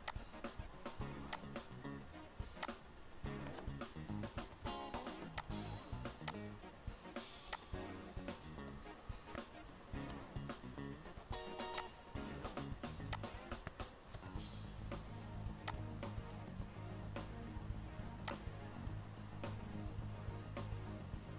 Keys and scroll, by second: 4.6 Delete, 10.2 ctrl+Page_Down, 14.3 ctrl+Page_Down.